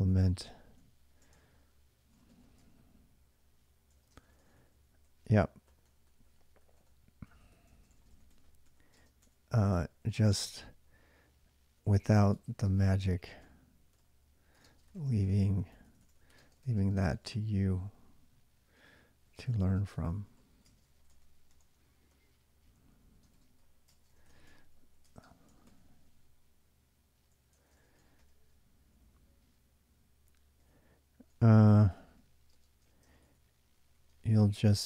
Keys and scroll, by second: 0.0-25.9 typing, 27.4 ctrl+[, 27.5-34.8 typing.